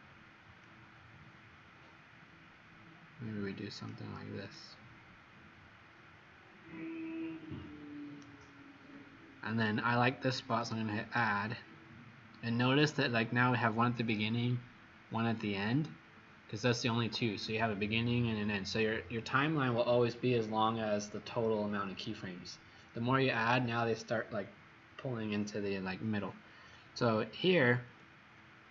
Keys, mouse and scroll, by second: 0.6 click, 4.5 right click, 10.5 click, 28.4 middle click.